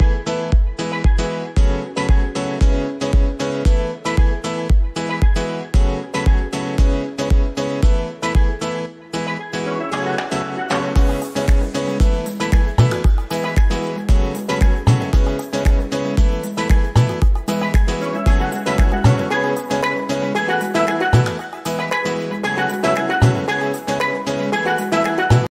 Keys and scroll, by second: 5.0 g, 17.5 F9.